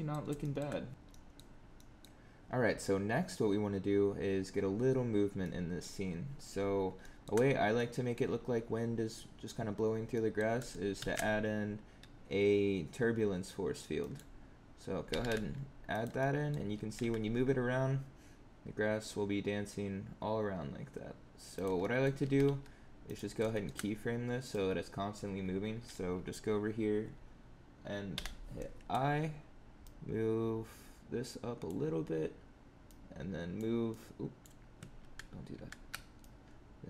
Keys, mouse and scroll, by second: 0.3 shift+middle click, 0.9 middle click, 1.0 middle click, 1.5 scroll down 2, 1.7 middle click, 5.3 middle click, 6.9 shift+middle click, 7.4 scroll up 3, 7.7 middle click, 9.7-10.0 scroll down 3, 10.2 middle click, 10.9 shift+a, 15.0 g, 16.1 middle click, 16.7 g, 21.7 middle click, 22.1 g, 23.4 shift+middle click, 24.3 click, 28.1 i, 29.8 click, 32.8 click, 33.8 click, 34.9 ctrl+z, 35.5 ctrl+z, 36.1 click.